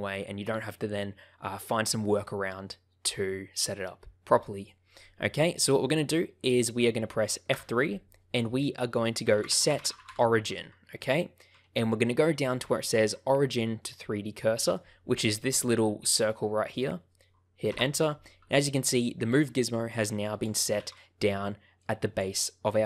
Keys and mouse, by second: 7.5 F3, 19.9 click, 20.7 ctrl+z, 21.7 click.